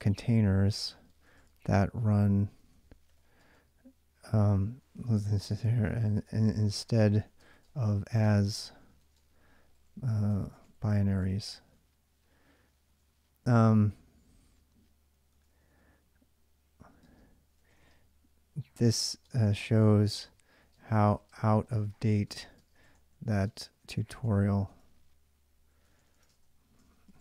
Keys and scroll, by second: 0.0-13.3 typing, 15.3 ctrl+a, 16.6-27.2 typing.